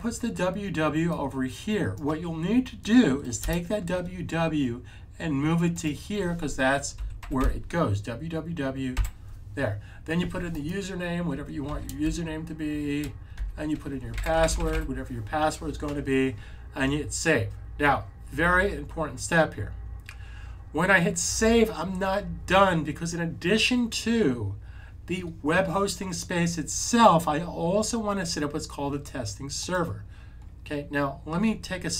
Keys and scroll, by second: 6.8-7.2 typing, 8.9 typing, 11.6 super+v, 12.6 typing.